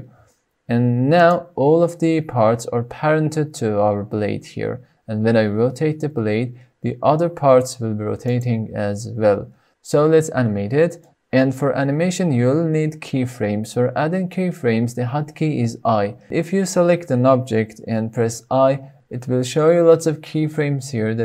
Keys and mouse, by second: 0.0 r, 1.0 right click, 5.2 r, 8.1 click, 10.1 click, 10.6 shift+click, 11.5-12.2 shift+drag.